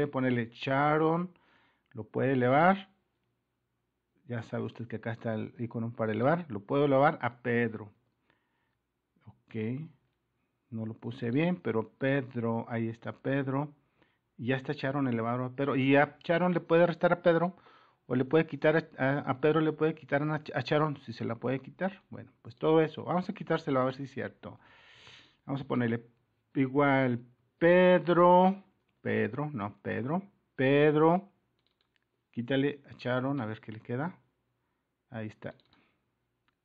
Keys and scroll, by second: 4.3-5.1 typing, 7.4-9.1 typing, 9.6 Return, 12.7-13.5 typing, 14.0 Return, 24.6 super++.